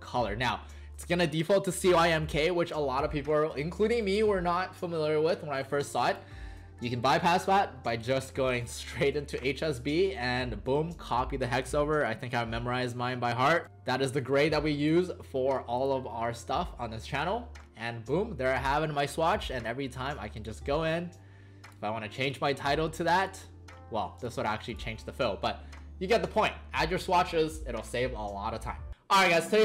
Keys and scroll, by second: 13.6 Return, 13.6 typing.